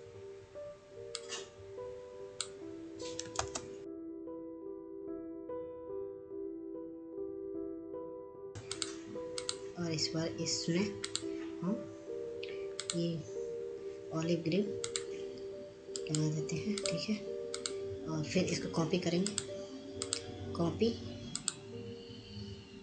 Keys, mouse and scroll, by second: 7.2 ctrl+space, 8.4-12.5 drag, 12.5 ctrl+space, 12.7 click, 18.9 click, 20.1 right click, 20.9 click.